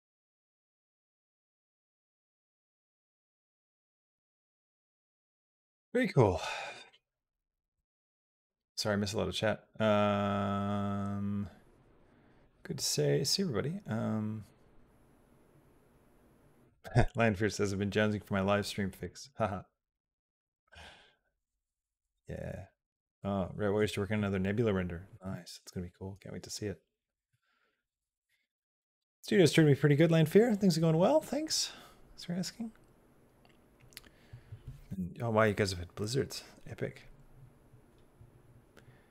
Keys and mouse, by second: 1.1 click, 3.3 click, 4.0 space.